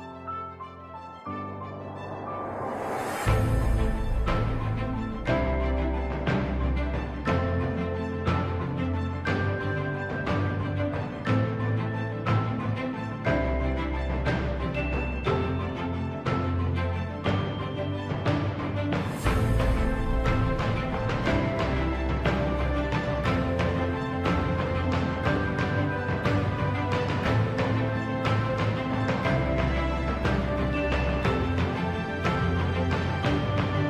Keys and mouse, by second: 0.6 middle click, 2.3 click, 3.2 KP_3, 4.9 g, 11.9 shift+middle click, 13.7 ctrl+r, 19.8 ctrl+r, 24.3 middle click, 25.0 3, 26.8 click, 29.1 KP_1, 32.4 z, 33.0 shift+middle click.